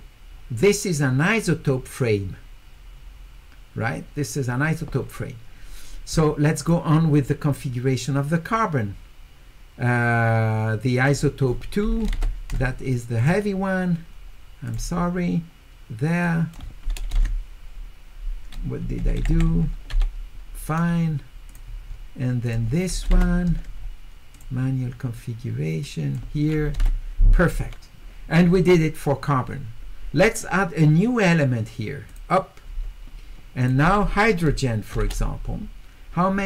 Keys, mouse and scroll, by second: 6.6 click, 11.1 click, 13.2 click, 14.7 click, 16.2 click, 21.5 click, 22.5 click, 24.3 click, 25.8 click, 32.1 click, 33.6 click.